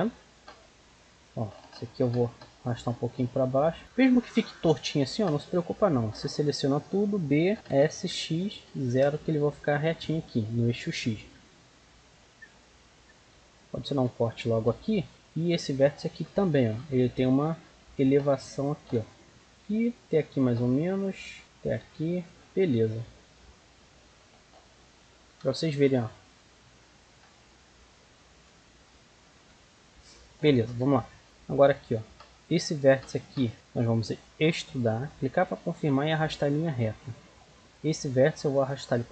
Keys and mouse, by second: 0.9-2.8 right drag, 1.9 g, 5.2 b, 7.5 s, 9.7 middle click, 11.2 middle click, 12.0-15.0 middle drag, 13.8 ctrl+r, 15.1-17.2 right drag, 16.3 g, 18.5-23.5 right drag, 18.7 g, 19.4 g, 21.0 g, 21.8 g, 22.8 z, 23.6 middle click, 25.2 KP_Decimal, 28.1 middle click, 29.3 KP_1, 29.5 middle click, 30.6 z, 31.2 a, 31.2 b, 31.7-32.8 drag, 32.8 right click, 33.5 c, 34.3 e, 35.7-37.6 drag, 37.8-39.1 right drag, 38.4-39.1 drag.